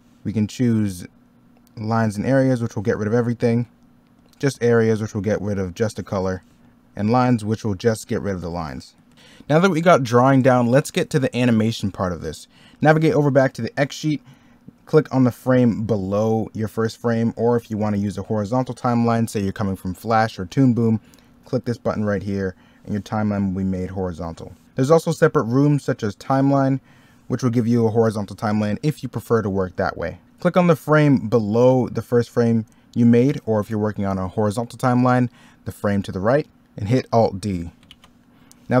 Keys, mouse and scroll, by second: 3.2 ctrl+z, 5.6 ctrl+z, 9.0 ctrl+z, 30.2 middle click.